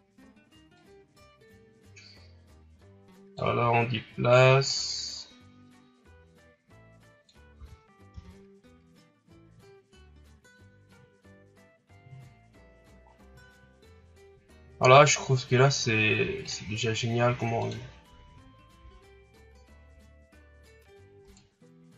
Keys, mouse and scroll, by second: 0.7-4.0 drag, 4.6-7.5 drag, 7.5 Tab, 8.1 a, 12.3 scroll down 5, 13.0 scroll up 4, 14.9 right click, 16.5 click, 21.2 right click.